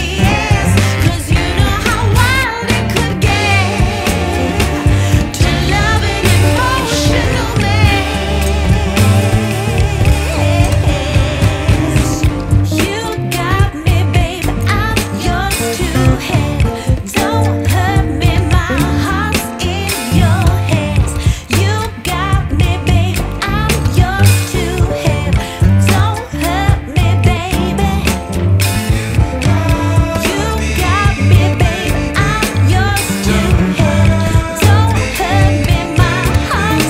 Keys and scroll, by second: 11.4 c, 14.6 Escape, 14.8 F2, 20.2 ctrl+z, 24.8 Escape, 27.7 F4, 28.3 Escape, 29.3 ctrl+q, 32.5 F2.